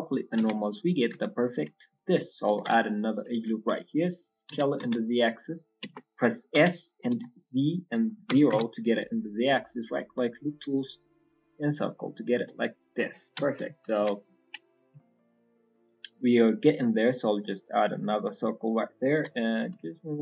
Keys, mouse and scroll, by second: 0.1 scroll up 3, 0.3 Tab, 0.5 middle click, 0.8 scroll up 2, 1.1 shift+middle click, 1.6 middle click, 2.5 ctrl+r, 4.5 s, 9.2 scroll up 2, 11.7 scroll down 4, 11.9 middle click, 12.1 scroll up 1, 12.6 s, 13.0-13.6 scroll down 2, 13.3 KP_1, 13.6 KP_3, 13.9 KP_1, 14.2-14.8 scroll up 3.